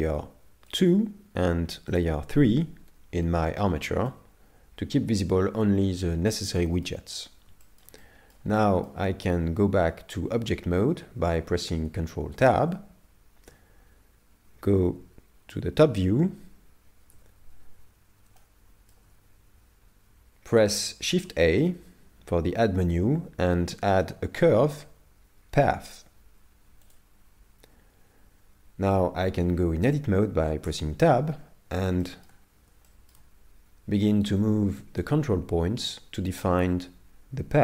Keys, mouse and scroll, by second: 0.8 shift+click, 4.1 middle click, 7.6 shift+middle click, 8.6 shift+middle click, 12.4 ctrl+Tab, 15.5 KP_7, 17.1 KP_5, 18.4 shift+middle click, 21.2 shift+a, 31.3 scroll down 4, 32.0 shift+middle click, 34.3 right click.